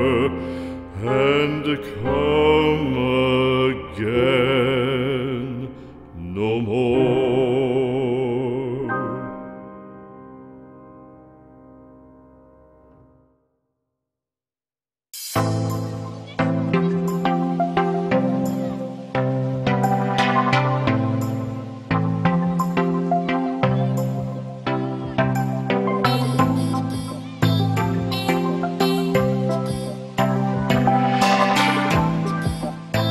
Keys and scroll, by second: 2.6 x, 5.2 x, 8.3 x, 9.6 z.